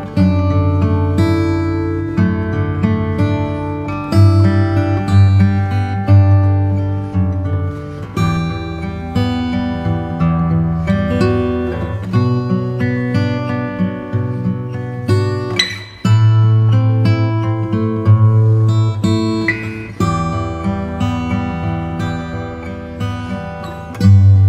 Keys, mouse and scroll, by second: 0.1-1.7 middle drag, 2.5 click, 2.5-5.7 middle drag, 5.1 ctrl+s, 5.1 ctrl+s, 6.4-8.2 middle drag, 12.8 n, 17.4-20.9 drag, 20.9 m, 22.0 Return.